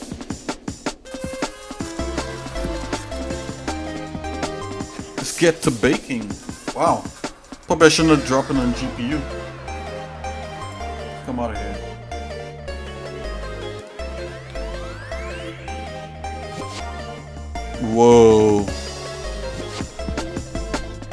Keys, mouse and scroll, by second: 8.1 middle click.